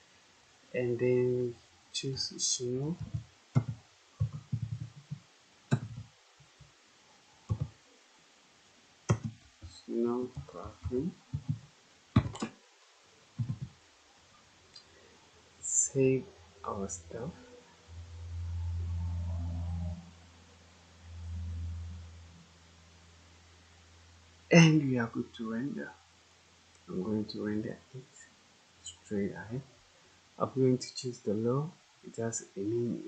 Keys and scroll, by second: 2.5-7.4 typing, 9.0-11.9 typing, 13.3 BackSpace, 15.7-16.4 typing.